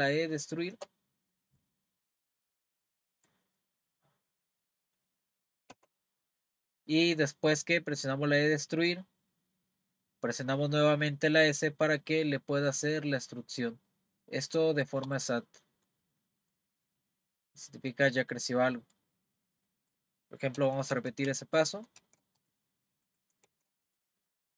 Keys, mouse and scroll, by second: 1.3-4.4 middle drag, 5.7 s, 15.1 click, 15.4-20.4 middle drag, 20.6 z, 20.9 z, 21.3 z, 22.0 z, 22.4 click, 23.0 click, 23.5 z, 23.8 click, 24.3-24.5 middle drag.